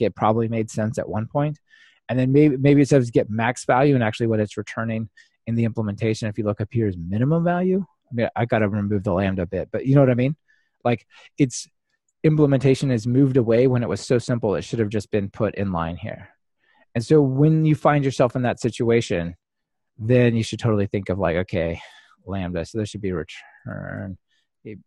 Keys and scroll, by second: 22.4 super+c.